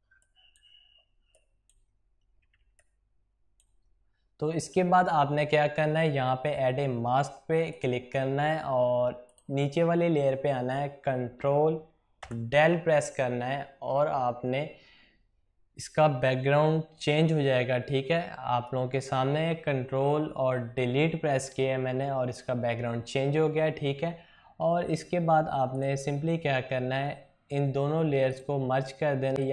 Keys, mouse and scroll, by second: 2.2 typing, 2.6 click, 7.5 click, 12.1 ctrl+Delete, 25.6 click, 28.1 ctrl+click, 29.4 right click.